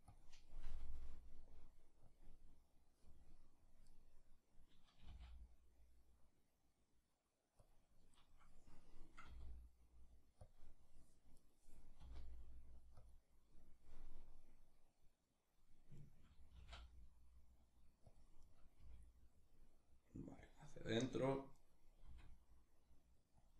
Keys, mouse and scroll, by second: 0.3 r, 1.8 click, 3.5 right click, 4.6 g, 7.3 click, 7.8 right click, 8.9 r, 10.1 click, 11.0 right click, 11.6 r, 12.7 click, 15.6 right click, 16.1 g, 17.8 click, 18.0 right click, 18.4 g, 20.1 click, 20.6-21.6 right drag, 21.6 r, 23.1 click.